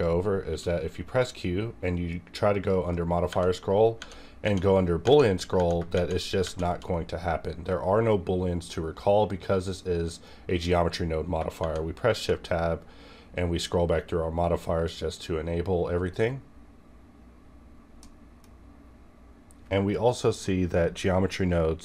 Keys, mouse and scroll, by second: 0.4 q, 2.5 click, 3.3 Tab, 5.9 Tab, 5.9 shift+Right, 7.1-9.8 scroll up 4, 9.8 scroll up 1, 11.4 shift+Num_Lock, 11.4 scroll up 1, 11.6 Tab, 11.6 shift+Right, 12.4-15.1 scroll up 2, 15.1-15.8 scroll down 2, 15.8 scroll up 1, 18.0-21.8 middle drag.